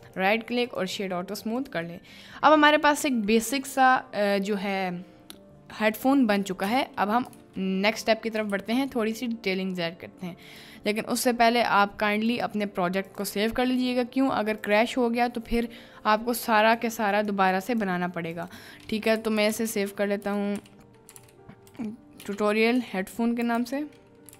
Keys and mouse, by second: 0.1 click, 1.1 middle click, 1.6 drag, 2.0-2.4 middle drag, 3.3-3.6 middle drag, 6.7 click, 7.4 ctrl+d, 8.5 ctrl+s.